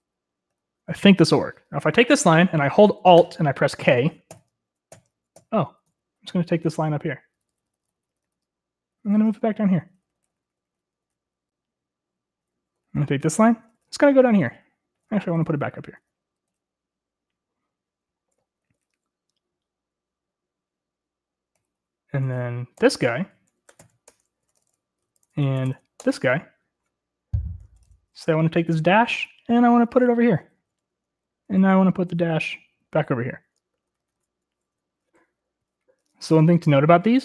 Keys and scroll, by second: 1.5 k, 5.2 alt+k, 6.0 alt+k, 6.5 alt+k, 6.9 alt+k, 7.4 alt+k, 7.7 alt+k, 8.1 alt+k, 8.3 alt+k, 8.5 alt+k, 9.7-10.2 alt+j, 10.8 alt+j, 11.2 alt+j, 11.5 alt+j, 11.8 alt+j, 13.2-13.7 typing, 14.3 alt+j, 14.5 alt+j, 14.8 alt+j, 14.9 alt+j, 15.1 alt+j, 15.5 alt+k, 15.7 alt+j, 15.7 alt+k, 16.3 alt+k, 16.5 alt+k, 16.6 alt+k, 17.1 alt+j, 18.8-19.6 typing, 22.1-23.3 typing, 24.2 ctrl+r, 24.3 ctrl+l, 24.6 Return, 24.7-26.2 typing, 26.5 Return, 27.5-28.3 typing, 29.7 alt+h, 29.8 alt+h, 30.1-31.7 alt+h, 31.5-33.1 typing, 33.3 alt+l, 33.4 alt+l, 33.5 alt+l, 33.9 alt+h, 34.1 alt+h, 34.2 alt+h, 34.3 alt+h.